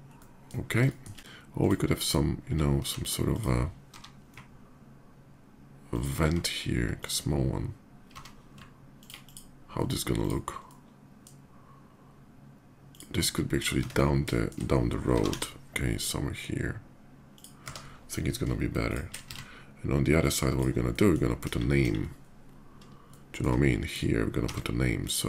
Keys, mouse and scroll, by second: 0.6 shift+middle click, 1.3 click, 3.1 click, 3.1 s, 3.7 g, 5.4 ctrl+g, 5.7 ctrl+click, 6.1 s, 6.8 click, 8.0 d, 8.7 alt+click, 9.0 alt+click, 10.0 click, 10.4-11.0 alt+middle drag, 12.5 click, 13.1 middle click, 13.6 Tab, 14.2 shift+Tab, 14.9 g, 15.2 y, 17.1 click, 17.5 Tab, 17.8 middle click, 18.6 shift+click, 19.3 alt+x, 20.0 click, 20.3 drag, 20.7 middle drag, 21.2 KP_5, 22.1 KP_5, 22.6 middle click, 23.1 middle click, 23.6 shift+click, 24.2 d.